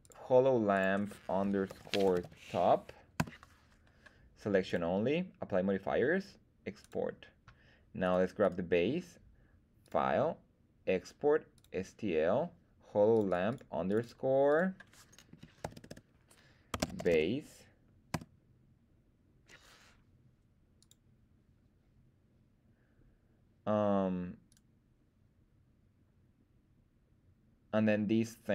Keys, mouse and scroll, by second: 8.0 right click, 8.4 right click, 9.8-11.6 drag, 24.5 right click.